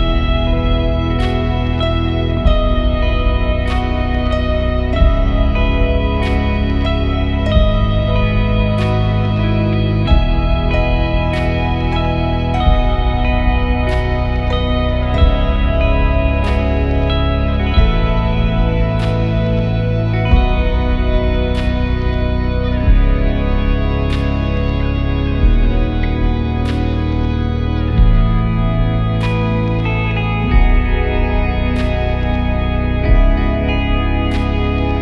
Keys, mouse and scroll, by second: 0.7 alt+F7, 1.2 F7, 1.8 alt+F7, 2.5 alt+F7, 3.1 alt+F7, 6.3 alt+click, 8.6 click, 12.4 alt+space, 18.2 click, 20.6 click, 27.0 alt+click, 27.8 alt+click, 32.5-35.0 alt+drag.